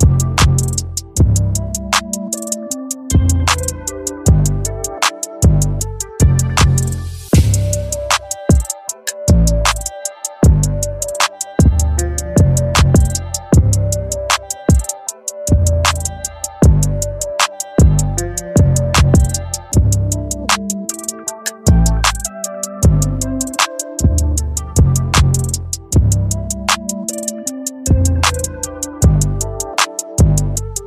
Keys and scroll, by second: 7.5 BackSpace, 16.4 ], 19.2 ctrl+z.